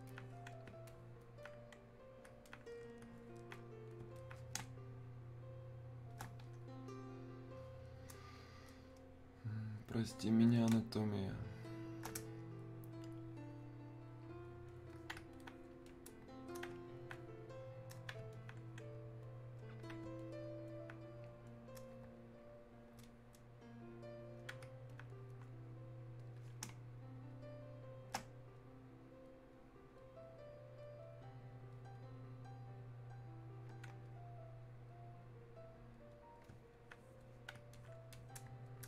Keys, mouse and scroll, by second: 0.1-4.2 alt+drag, 4.6 space, 5.4 click, 5.5 space, 6.3 space, 9.8 click, 10.7 space, 11.3 click, 11.6 space, 12.4-18.3 shift+drag, 18.3-20.2 alt+drag, 20.7-23.0 alt+drag, 23.0-26.2 drag, 26.7 space, 27.3 click, 27.4 space, 28.6-38.8 drag.